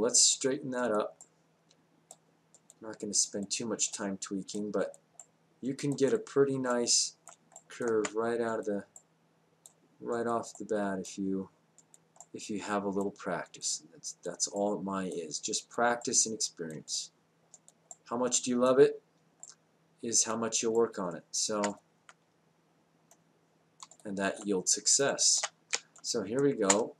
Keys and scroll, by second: 25.8 space.